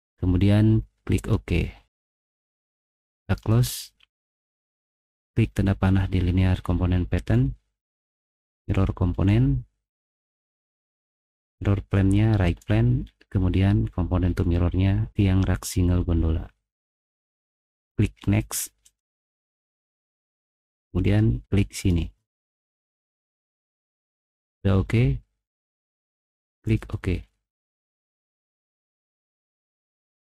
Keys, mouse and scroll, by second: 1.1 click, 2.3 click, 8.5 click, 12.4 click, 15.5 click, 17.6 click, 22.7 middle click, 22.7-23.2 scroll up 4, 23.0 middle click, 23.5 middle click, 26.4 click, 29.9 click.